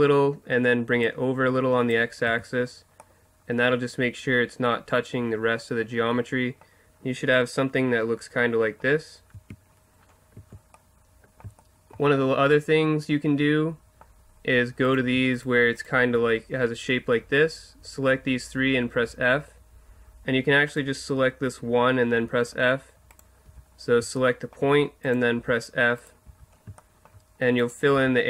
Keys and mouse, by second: 1.0-2.6 drag, 2.3 Tab, 7.3-8.3 middle drag, 9.3 Tab, 10.3 a, 14.8-17.6 right drag, 19.1 f, 20.7-22.5 right drag, 22.1 f, 23.1-25.0 right drag, 23.4 f, 25.4 f, 26.0-27.6 right drag, 26.3 f, 27.9 f.